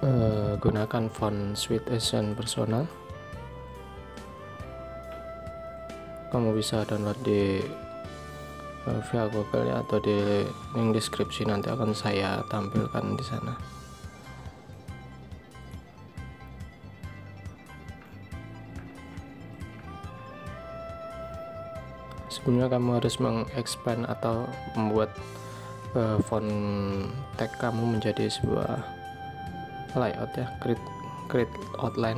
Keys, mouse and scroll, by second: 6.9 shift+click, 9.4 alt+scroll up 1, 11.5 alt+scroll down 1, 13.4-16.1 alt+scroll up 1, 17.2 alt+scroll up 1, 18.4-18.9 alt+scroll up 1, 19.2 alt+scroll down 1, 20.0-20.4 alt+scroll up 1, 21.1 alt+scroll up 1.